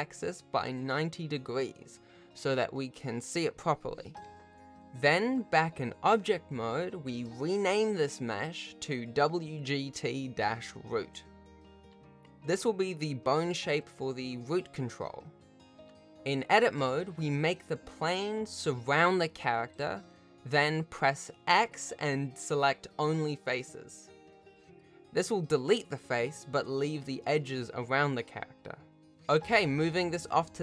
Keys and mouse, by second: 6.7 BackSpace, 9.2 o, 10.0 Tab, 11.0 g, 12.0 s, 13.4 g, 15.0 s, 15.8 g, 16.9 x, 19.8 shift+click, 21.2 g, 21.2 x, 26.6 ctrl+s, 27.5 ctrl+s, 29.7 shift+middle click.